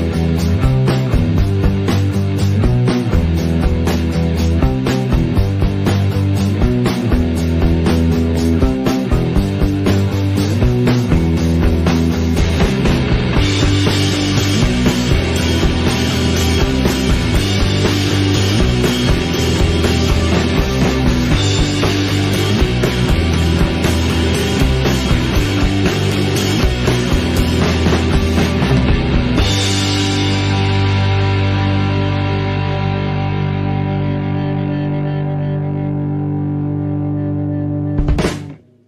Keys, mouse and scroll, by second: 0.3-0.8 middle drag, 0.8 KP_0, 1.9 scroll up 2, 2.1-2.5 scroll down 2, 2.5 shift+middle click, 2.8-3.6 scroll up 1, 3.6 click, 5.9 ctrl+l, 6.4 scroll up 1, 6.7 alt+a, 7.0 click, 8.0 click, 9.7-11.3 drag, 12.2-13.3 drag, 14.2-15.2 drag, 15.2-16.7 shift+middle drag, 16.7 KP_Decimal, 17.0 alt+a, 17.1-17.5 middle drag, 17.5 drag, 17.8 s, 18.2-18.7 middle drag, 18.7 click, 19.6-20.2 middle drag, 20.2 s, 20.9-21.5 middle drag, 21.5 s, 22.4-28.2 middle drag, 28.8 s, 29.6-30.4 middle drag, 30.4 shift+click, 30.9 ctrl+j, 31.2 alt+a, 31.3-31.8 middle drag, 31.8 click, 32.2 shift+d, 32.7 click, 33.2 middle click, 33.5 Tab, 33.7 scroll up 1, 33.8 alt+a, 34.3 click, 35.5 click, 36.5 alt+a, 37.0 Tab, 37.2 click, 37.3 Tab, 37.6 middle drag, 37.8 alt+a, 38.2 alt+click.